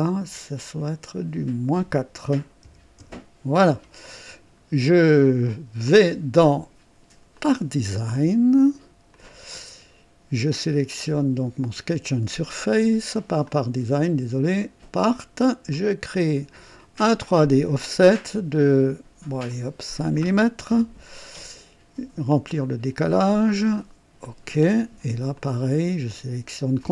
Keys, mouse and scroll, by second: 0.5 click, 1.0 click, 2.6 KP_Subtract, 3.1 KP_Enter, 7.4 click, 9.1 click, 13.4 click, 14.7 click, 15.7 click, 16.8 click, 19.5 click, 20.7 KP_5, 22.4 click, 24.2 click, 25.3 click, 26.8 ctrl+click.